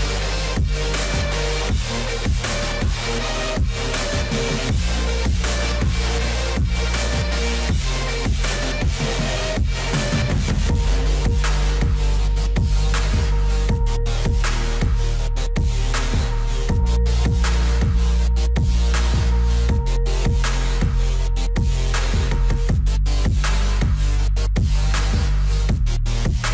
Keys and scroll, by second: 21.9 F4.